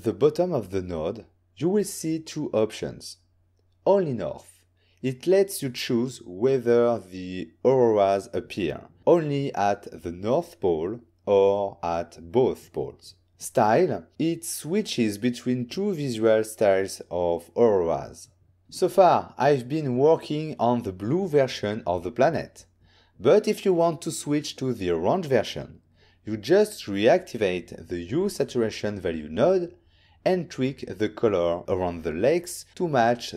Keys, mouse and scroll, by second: 0.9-2.6 scroll up 3, 4.2 click, 8.2 click, 9.7 ctrl+middle click, 11.8 click, 13.8 click, 14.7 click, 14.9 click, 15.5 middle click, 16.5 ctrl+middle click, 17.7 middle click, 19.7 click, 20.9 z, 22.4 click, 23.4 click, 24.7 ctrl+middle click, 25.9 click, 26.7 m, 27.2 ctrl+middle click, 28.0 click, 28.5 click, 32.6 ctrl+middle click.